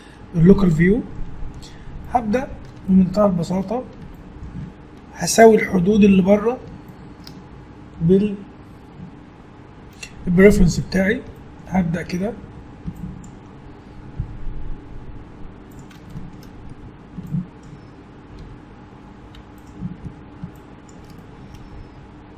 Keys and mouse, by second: 2.6-4.3 middle drag, 12.4 a, 14.2 g, 16.9 a, 18.6 g, 20.2 a.